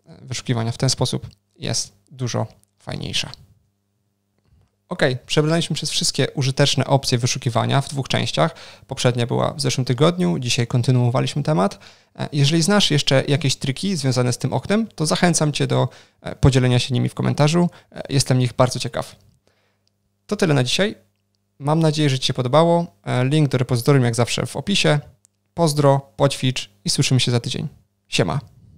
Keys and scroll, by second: 3.2 ctrl+shift+super+o.